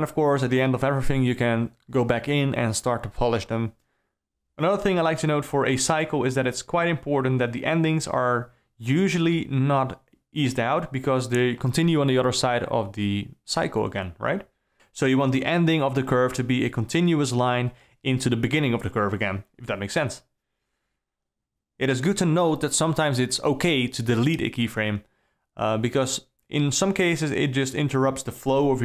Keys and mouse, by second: 0.6 d, 0.7 d, 0.8 d, 1.9 d, 2.0 d, 3.2 d, 3.4 shift+Left, 4.7 click, 5.5 s, 6.3 click, 6.6 r, 8.6 r, 11.3 s, 12.3 s, 13.9 space, 16.5 space, 18.9 drag, 20.7 g, 25.1 click, 26.6 click, 27.3 g, 28.7 shift+Down.